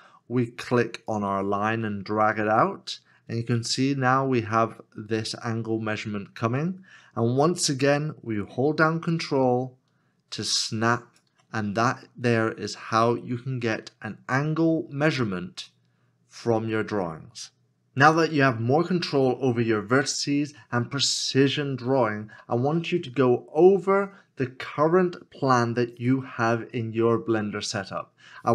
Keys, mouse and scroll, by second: 9.3 ctrl+click.